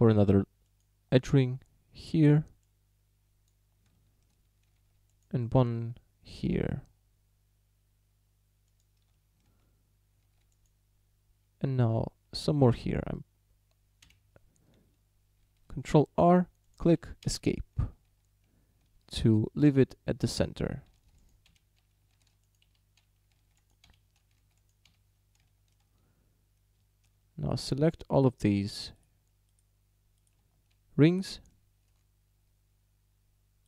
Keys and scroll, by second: 4.8 ctrl+r, 10.3 ctrl+r, 14.1 Escape, 15.8 ctrl+r, 17.3 Escape, 19.0 ctrl+r, 19.7 Escape, 21.0 ctrl+r, 21.5 Escape, 22.2 ctrl+r, 22.7 Escape, 23.4 ctrl+r, 23.9 Escape, 24.4 ctrl+r, 24.9 Escape.